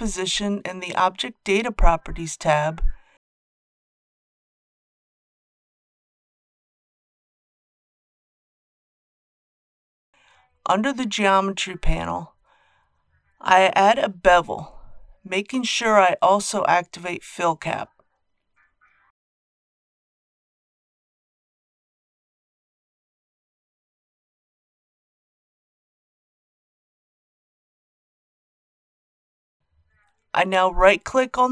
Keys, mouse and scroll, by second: 0.6-0.9 scroll up 1, 7.4 click, 8.1 scroll down 1, 15.6-21.8 drag, 22.5 KP_Decimal, 22.7 KP_0, 22.9 KP_5, 26.9 click, 29.6-30.5 scroll down 1, 30.5-31.5 right drag.